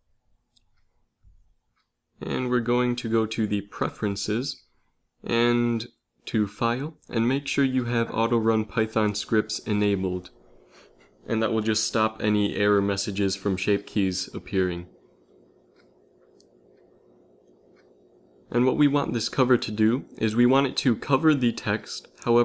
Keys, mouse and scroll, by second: 0.0 z, 1.6 ctrl+alt+u, 15.1 middle click, 15.7 z.